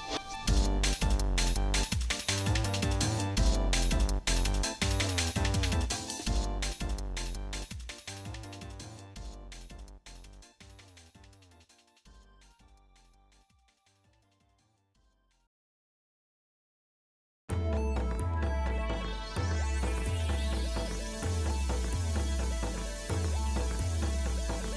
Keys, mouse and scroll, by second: 0.6 ctrl+j, 1.5 middle click, 2.1 Tab, 2.7 shift+middle click, 5.6 l, 6.6 l, 8.9 click, 12.5 l, 14.3 alt+n, 16.3 click, 16.9 shift+middle click, 17.9 shift+middle click, 18.3 shift+middle click, 18.5 shift+middle click, 18.8 shift+middle click, 19.8 shift+middle click, 19.9 shift+middle click, 20.3 shift+middle click, 20.7 shift+middle click, 21.0 shift+middle click, 21.4 shift+middle click, 21.8 middle click, 22.3 middle click, 23.0 shift+middle click, 23.7 Tab, 24.3 click.